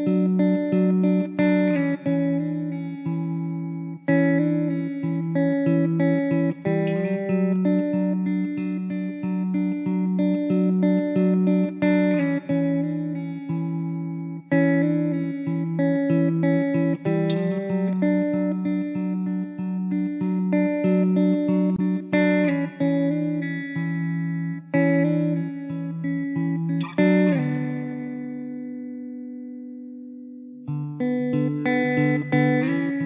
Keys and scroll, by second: 2.9 Tab, 4.3 KP_0, 7.9 Tab, 8.5 `, 9.8 shift+a, 11.6 s, 12.6 `, 13.2 s, 16.9 z, 17.3 s, 18.2 s, 19.1 s, 22.0 shift+d, 25.5 shift+d.